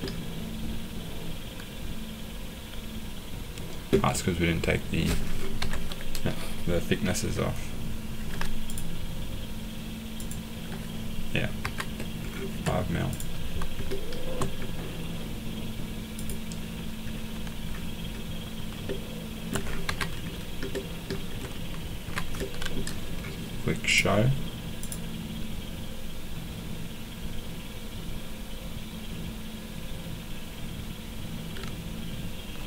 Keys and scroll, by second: 5.6 Escape, 8.2 m, 11.6 Escape, 19.8 Escape, 22.0 Escape.